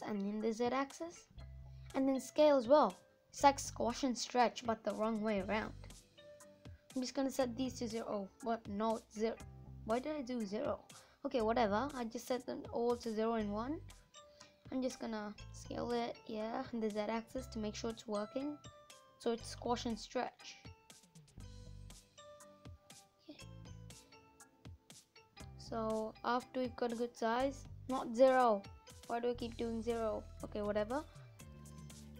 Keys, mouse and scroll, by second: 8.0 ctrl+z, 8.2 ctrl+z, 8.6 ctrl+z, 8.9 ctrl+z, 9.3 ctrl+z, 10.0 scroll down 1, 10.1 middle click, 10.4-11.1 scroll up 5, 11.1 middle click, 11.4 scroll down 2, 13.9-17.1 drag, 26.7-30.5 drag, 30.5 middle click, 31.0 scroll down 2.